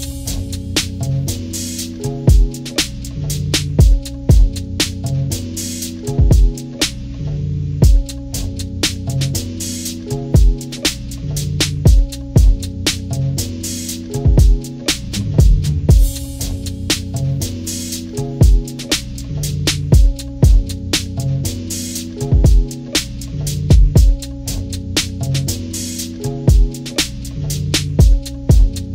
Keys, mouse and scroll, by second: 0.2 ctrl+=, 0.4 ctrl+=, 0.6 ctrl+=, 5.4 click, 11.2 click, 13.9-15.4 drag, 15.5 click, 16.1 click, 16.2 click, 16.8 click, 17.2 click, 17.8 ctrl+-, 18.0 click, 18.1 ctrl+-, 18.1 ctrl+=, 18.2 scroll down 2, 18.4 click, 19.0-20.3 drag, 20.6 ctrl+-, 20.7 ctrl+=, 20.9 click, 21.2 click, 22.2 click, 23.1 click, 23.1 ctrl+-, 23.3 click, 23.5 click, 23.8 ctrl+-, 24.1 click, 24.4 click, 24.7 click, 25.3 click, 25.7 ctrl+-, 25.9 click, 25.9 ctrl+-, 26.3 click, 26.5 ctrl+scroll up 2, 26.7 click, 27.3 click, 27.9 ctrl+-, 28.1 click, 28.2 ctrl+-, 28.3 ctrl+=, 28.6 click.